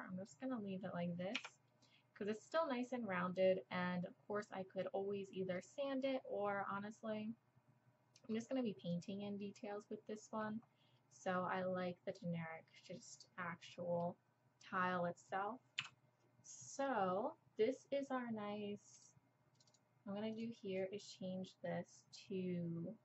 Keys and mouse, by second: 0.5 middle click, 1.4 Tab, 4.0-4.5 middle drag, 5.7-7.2 middle drag, 7.3-7.7 middle drag, 7.9-8.4 middle drag, 8.8-9.2 middle drag, 9.6 middle drag, 10.7-12.7 middle drag, 13.1-13.8 middle drag, 15.8 KP_7, 18.9 middle click, 19.3-23.0 drag.